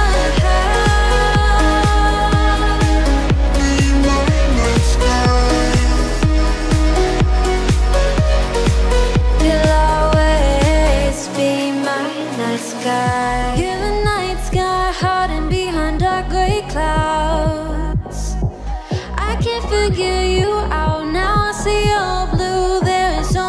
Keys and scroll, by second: 20.3 ctrl+e.